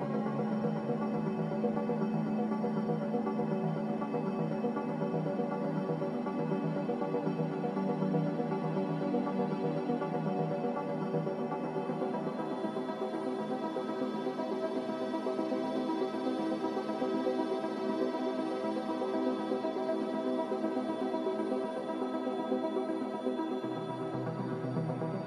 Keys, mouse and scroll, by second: 0.4 b, 1.5 a, 11.3 m, 12.4 b, 13.3 m.